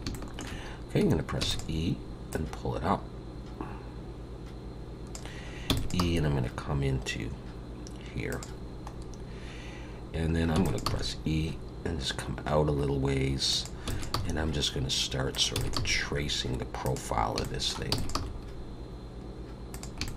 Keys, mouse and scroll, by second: 0.1 shift+middle click, 1.4 e, 2.3 click, 5.7 e, 6.0 g, 8.9 scroll up 1.